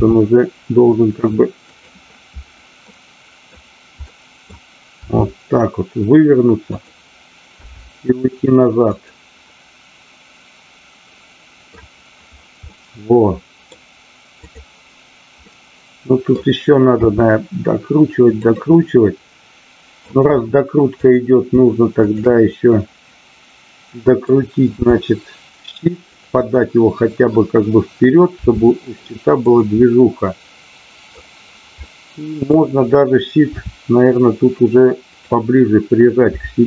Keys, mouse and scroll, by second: 0.0 r, 1.7 click, 2.9 middle click, 4.0 middle click, 5.1 r, 6.7 click, 7.6 g, 8.9 drag, 9.6-11.8 middle drag, 12.6-13.7 middle drag, 14.4-15.2 drag, 15.4-16.2 middle drag, 16.9 r, 18.5 click, 18.8-20.1 middle drag, 20.9 click, 21.9-22.8 shift+drag, 22.8-24.3 middle drag, 26.1 click, 26.3 scroll up 1, 26.6-27.3 middle drag, 28.3 r, 29.4 click, 29.7-31.2 middle drag, 31.7-32.4 middle drag, 33.6 r, 35.0 click, 36.2 g.